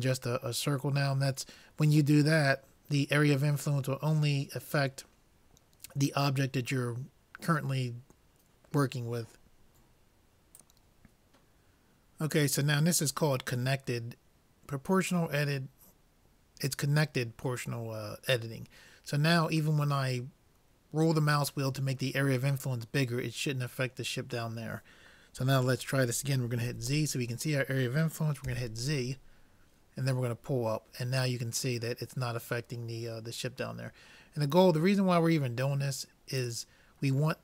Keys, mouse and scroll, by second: 26.6 g.